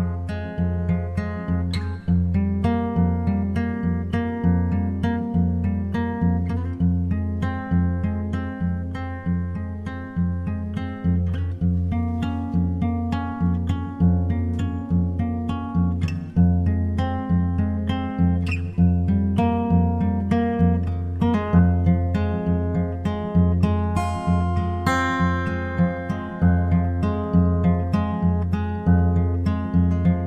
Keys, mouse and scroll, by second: 1.1 g, 7.6-9.3 drag, 9.3 g, 14.6-16.4 drag, 16.2 s, 19.1-20.9 drag, 20.4 g, 23.0-24.6 drag, 23.7 n, 26.2-27.9 right drag, 27.3 Tab, 29.8-30.2 scroll down 1.